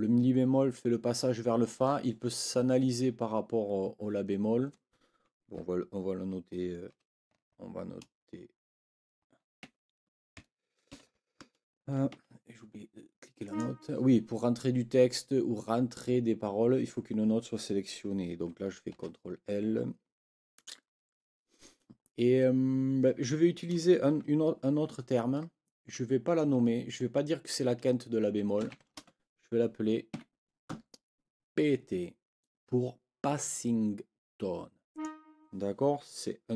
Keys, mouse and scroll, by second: 6.9 ctrl+t, 9.6 shift+Escape, 10.9 ctrl+l, 12.1 Escape, 13.4 click, 18.9 ctrl+l, 28.3-29.3 typing, 30.1 Escape, 34.9 click.